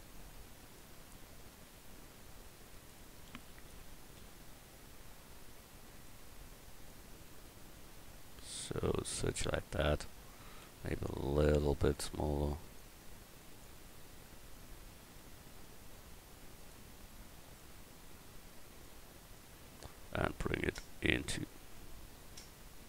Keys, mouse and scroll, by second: 1.3 s, 3.3 s, 6.9-9.5 drag, 10.6 s, 12.7-14.8 drag, 14.8 s, 17.5-19.6 drag, 20.6-22.8 drag.